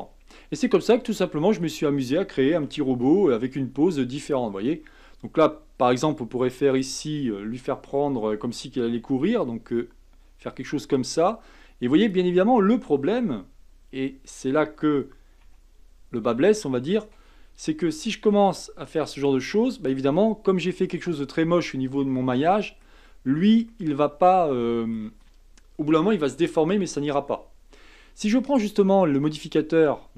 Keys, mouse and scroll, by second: 0.7-1.6 scroll up 1, 1.6 click, 2.5 r, 4.7-6.7 middle drag, 6.7 click, 9.2 r, 12.0 click, 13.1 r, 18.3 r, 20.1-21.2 middle drag, 21.2-21.6 scroll up 3, 21.9-22.4 scroll down 2, 22.4-25.0 middle drag, 25.0-28.0 scroll up 1, 28.5 click, 29.3 click.